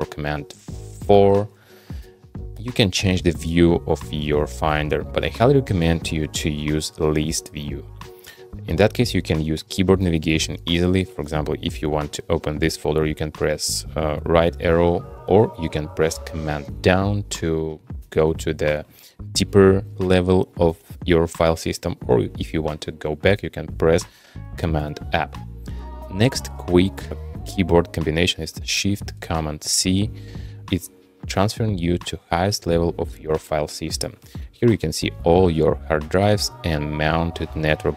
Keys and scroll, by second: 1.1 super+4, 2.6 super+3, 2.9 super+2, 16.6 super+Down, 24.8 super+Up, 29.7 shift+super+c.